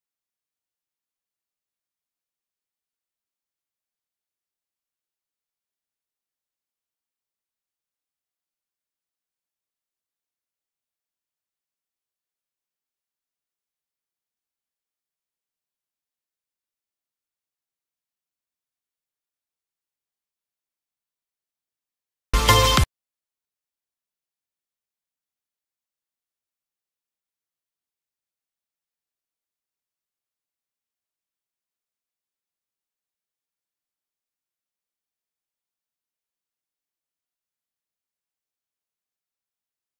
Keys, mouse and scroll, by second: 2.8 click, 3.1 click, 3.5 click, 3.7 n, 3.8-4.8 scroll down 20, 4.3 middle click, 4.5 shift+middle click, 4.8 middle click, 5.0 shift+middle click, 5.3 Tab, 5.7 click, 5.9 Tab, 6.8 click, 7.3 click, 7.8 click, 8.0 g, 8.8 Tab, 9.4 click, 9.8 click, 10.4 click, 10.8 click, 11.1 click, 11.4 click, 12.7 click, 14.0 click, 15.1 middle click, 15.5 scroll up 1, 15.9 shift+middle click, 16.7 shift+middle click, 17.4 click, 18.0 click, 18.5 shift+a, 19.6 g, 21.6 click, 22.0 click, 23.1 click, 23.6 click, 24.2 g, 24.2 z, 24.5 g, 25.1 KP_0, 25.1 scroll down 2, 25.8 click, 25.9 scroll up 1, 26.0 middle click, 26.3-28.9 typing, 26.7 scroll down 3, 26.7 middle click, 30.3 click, 31.1 g, 33.2 click, 33.6 shift+middle click, 34.2 click, 34.7 click, 35.3 click, 36.7 click, 37.1 click.